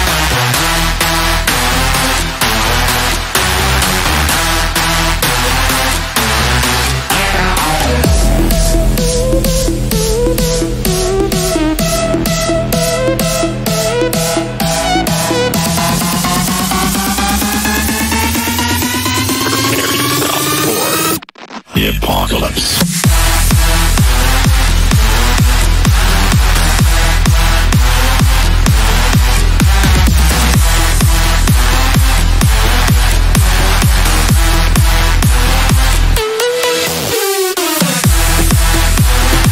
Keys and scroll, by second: 8.4 Delete, 18.4 c, 18.8 e, 28.7 g.